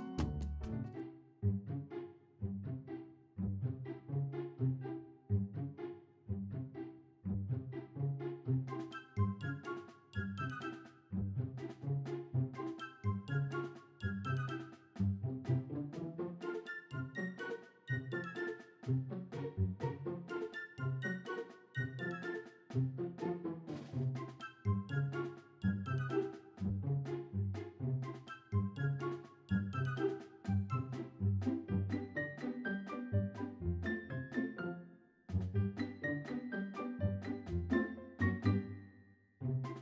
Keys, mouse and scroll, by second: 1.2 click, 1.7 click, 3.2 click, 5.1 click, 5.6 click, 6.1 click, 7.2 click, 8.3 click, 9.1-12.1 drag, 12.5 click, 13.2 click, 13.8-16.7 drag, 15.3 e, 17.0 click, 17.8 click, 18.4-21.7 drag, 22.4 click, 23.9 click, 26.2 click, 27.5 click, 29.7 click, 31.1 click, 35.2 click, 35.7 click, 37.0 Delete, 38.1 click, 38.8 shift+a.